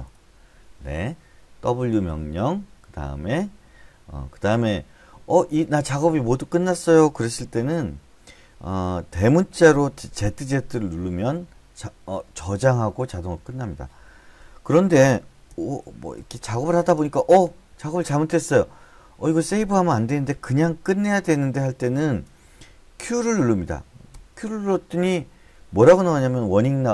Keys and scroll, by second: 15.5-17.2 typing, 21.9-23.9 typing, 24.1 Return.